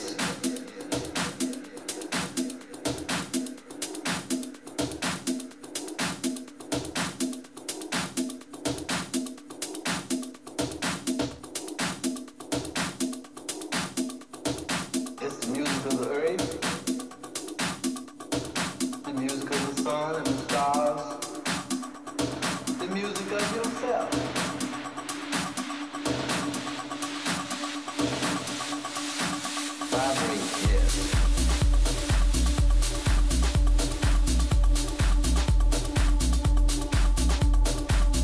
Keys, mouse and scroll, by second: 0.3-2.1 drag, 2.1-7.8 middle drag, 4.0 a, 15.5-18.5 middle drag, 20.5-24.1 middle drag, 25.5-29.5 middle drag, 29.8-30.6 scroll up 1, 30.6-34.2 middle drag, 35.4 Tab, 36.0-37.7 right drag, 37.0-38.2 middle drag.